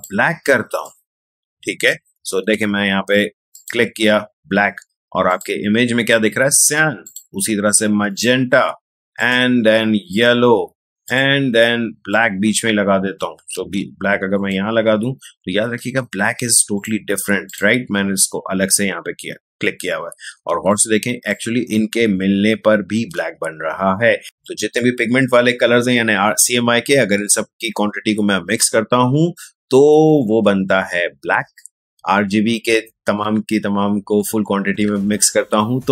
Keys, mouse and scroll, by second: 2.6 ctrl+z, 3.5 click, 13.5 ctrl+z, 14.3 click, 15.8 ctrl+z, 16.7 click, 19.9 space, 20.7-24.2 ctrl+drag.